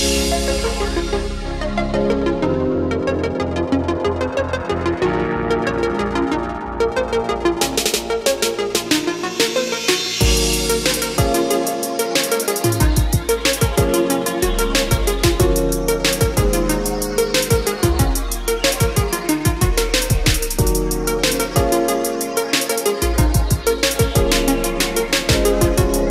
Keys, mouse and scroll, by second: 1.2 click, 1.6 scroll down 1, 2.1 scroll up 1, 9.6 click, 16.4-26.1 drag.